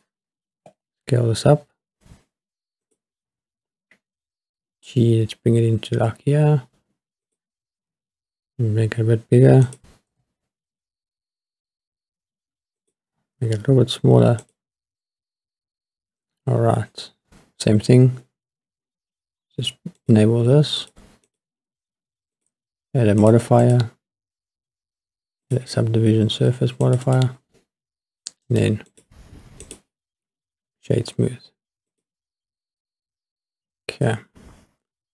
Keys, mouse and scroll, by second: 0.5 s, 2.8 click, 3.3 g, 7.3 click, 7.8 s, 9.7 click, 10.1 g, 13.3 click, 13.4 s, 14.4 click, 16.5-17.5 scroll up 1, 20.0 click, 20.8 click, 21.3 click, 22.4 click, 23.2 click, 23.6-25.5 drag, 26.8 click, 27.0 click, 28.4 right click, 29.6 click, 32.3 click.